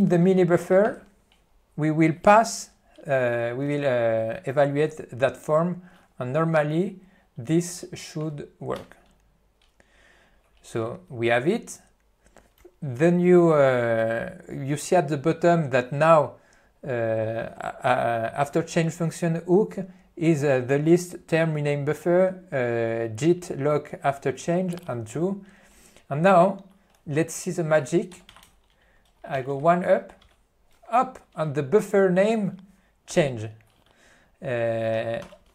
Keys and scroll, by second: 1.0 ctrl+y, 8.9 Return, 28.2 c, 28.5 d.